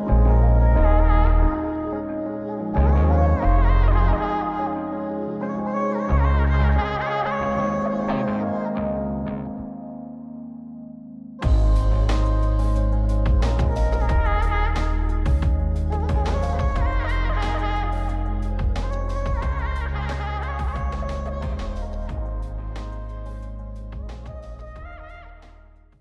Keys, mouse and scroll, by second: 0.3 r, 2.9 s, 5.4-6.5 drag, 6.6-7.0 scroll down 2, 6.9 middle click, 7.4 s, 9.8-10.4 middle drag, 10.9 g, 11.8 middle drag, 12.7-14.9 drag, 15.9 g, 19.7 r, 20.1-22.1 middle drag, 22.5 r, 24.1 alt+r, 24.6 alt+g, 24.6 alt+h, 25.3 middle click.